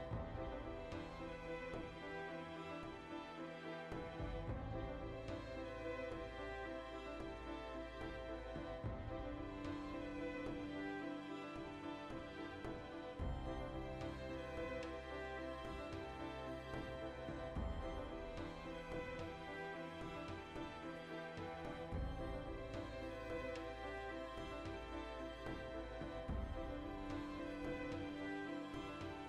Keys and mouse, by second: 6.1 right click, 6.3 ctrl+shift+middle click, 6.6 right click, 6.6 1, 6.9 ctrl+middle click, 7.5 click, 8.0 \, 8.3-10.7 middle drag, 8.5 KP_Decimal, 9.9 g, 10.4 click, 10.7 right click, 10.8 g, 11.3-12.8 ctrl+middle drag, 12.8 right click, 12.9 g, 13.4 right click, 13.5 g, 13.8 click, 13.9-18.2 ctrl+middle drag, 18.2 right click, 18.4-20.1 middle drag, 19.8 g, 20.3 right click, 20.4 g, 20.7 click, 20.9-22.2 middle drag, 21.3 ctrl+z, 21.9 g, 22.2 click, 22.4 right click, 22.6 g, 23.0 right click, 23.1 g, 23.3 click, 23.5 shift+middle click, 23.9 right click, 24.0 g, 24.3 click, 24.4 middle click, 25.1 right click, 25.2 g, 25.5 click, 25.6-27.3 middle drag, 27.3 right click, 27.4 g, 27.7 click, 27.8 middle click, 28.5 right click, 28.6 g, 28.9 ctrl+shift+middle click.